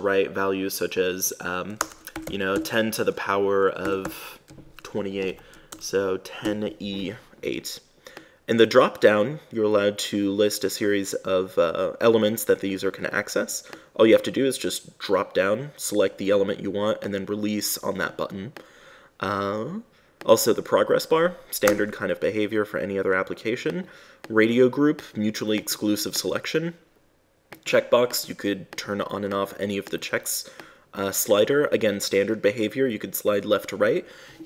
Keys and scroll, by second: 2.1 BackSpace, 5.7 Left, 6.1 BackSpace, 22.1 space.